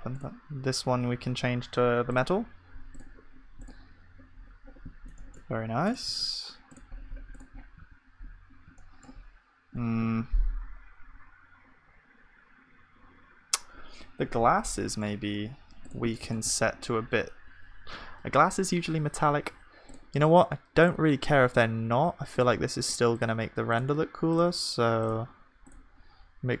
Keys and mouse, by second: 7.8 ctrl+s, 16.4-26.6 drag.